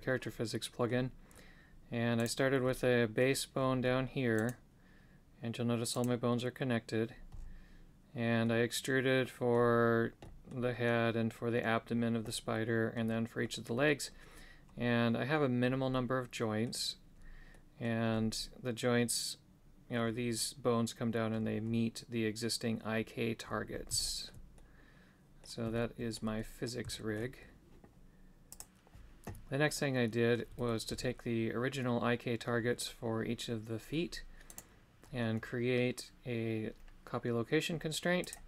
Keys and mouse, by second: 0.2 middle click, 2.2 right click, 2.6 middle click, 8.4-9.5 middle drag, 10.2 middle click, 12.2 middle click, 13.8 middle click, 15.9 middle click, 17.5 middle click, 24.0 shift+middle click, 24.5 middle click, 25.7 shift+middle click, 26.4 middle click, 26.9 shift+middle click, 29.7 middle click, 38.2 click.